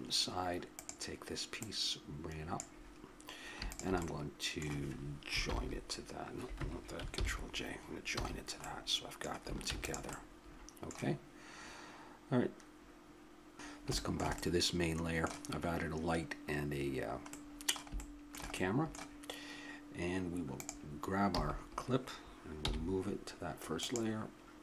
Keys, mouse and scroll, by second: 1.3-3.3 drag, 4.0-5.5 middle drag, 5.5 ctrl+l, 7.1 ctrl+j, 8.1 a, 9.7 ctrl+s, 13.2 m, 13.8-20.6 middle drag, 13.8 m, 20.6-22.4 drag, 21.3 a, 22.6 m.